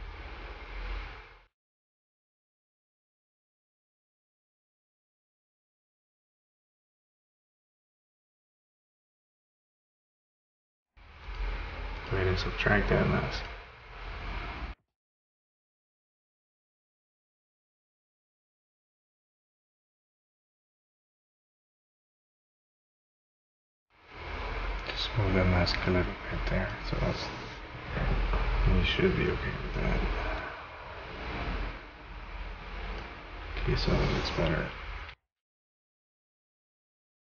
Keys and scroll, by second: 3.9 ctrl+z, 35.1 v.